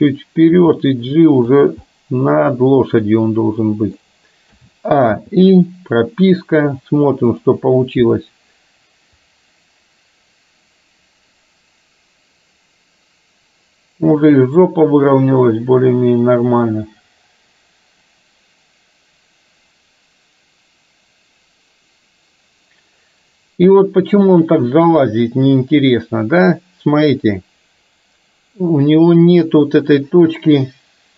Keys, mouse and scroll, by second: 0.5 g, 1.9-4.0 middle drag, 4.7 a, 5.2 i, 9.4-31.1 drag.